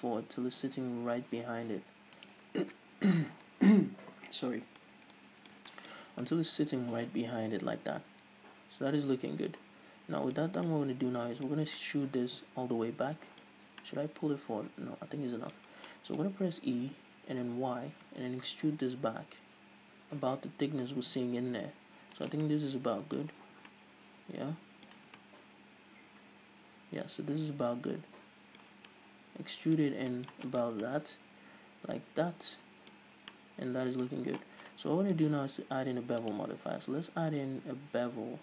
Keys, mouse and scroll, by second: 2.3 shift+click, 6.1 scroll down 2, 10.5 scroll down 2, 11.6 scroll up 2, 13.5-13.8 scroll up 2, 15.7 scroll down 2, 16.3-16.8 scroll up 2, 16.9 e, 22.3 shift+click, 22.5-30.5 middle drag, 23.4 scroll down 1, 23.6 Tab, 24.9 a, 28.8 scroll down 1, 29.8-30.1 scroll up 2, 30.5 right click, 30.9-36.3 middle drag, 33.0-33.4 scroll up 2, 34.4-34.7 scroll up 2, 36.3-38.4 drag.